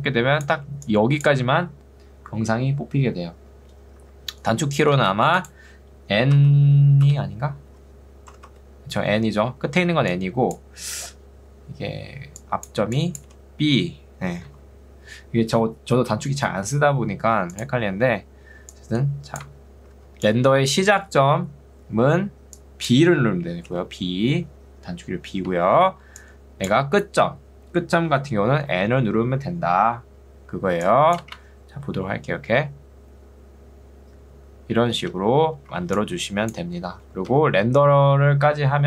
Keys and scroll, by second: 5.1 space, 6.5 n, 10.1 ctrl+2, 11.1 Escape, 13.3 b, 14.5 ctrl+z, 20.1 ctrl+2, 20.9 Escape, 23.7 b, 25.9 ctrl+z, 28.7 n, 31.3 space, 35.3 space, 35.9 ctrl+2, 37.3 Escape.